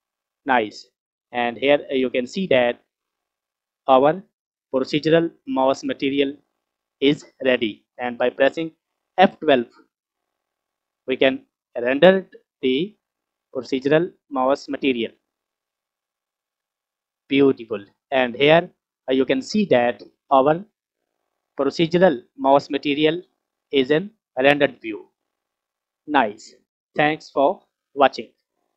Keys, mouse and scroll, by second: 0.2 scroll down 1, 1.7 click, 2.2 click, 2.3 click, 2.8-3.3 scroll up 2, 3.3-4.2 scroll down 2, 4.2 scroll up 1, 7.1 scroll up 1, 7.3-9.8 scroll down 1, 11.1 F12.